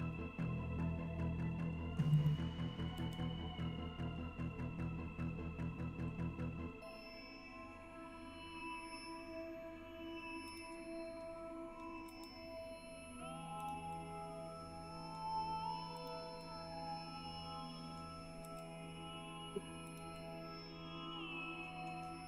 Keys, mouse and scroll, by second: 2.2 click, 3.0 s, 4.8-6.0 scroll up 6, 6.2-6.6 scroll down 2, 7.0 scroll down 1, 8.0-8.6 scroll up 2, 10.6 click, 12.2 g, 13.6 click, 13.9-15.2 middle drag, 16.0 click, 16.4-18.0 middle drag, 18.5 g, 20.0 click, 20.2-22.0 middle drag.